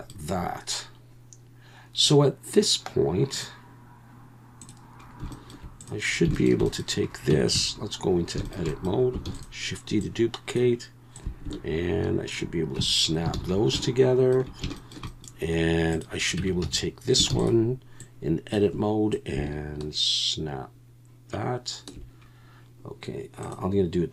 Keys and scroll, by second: 7.3 Tab, 7.5 a, 9.3 shift+d, 12.8 Tab, 13.4 alt+a, 16.4 Tab, 16.6 a, 17.3 shift+d.